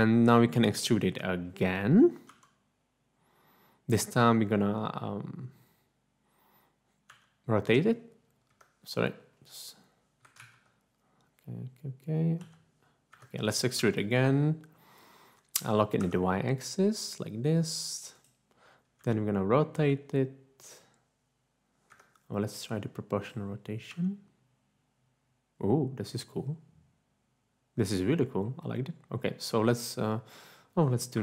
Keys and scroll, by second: 2.3 e, 7.2 r, 8.5 Escape, 10.4 ctrl+z, 12.3 g, 13.1 Escape, 14.0 e, 16.2 y, 19.1 r, 21.9 Escape, 23.9 r, 31.1 typing.